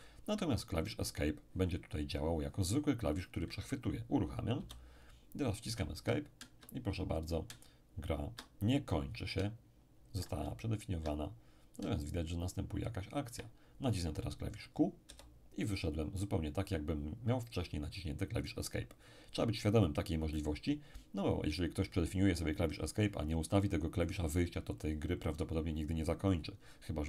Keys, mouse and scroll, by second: 4.6 p, 5.7 Escape, 6.0 Escape, 9.6 Escape, 15.1 q.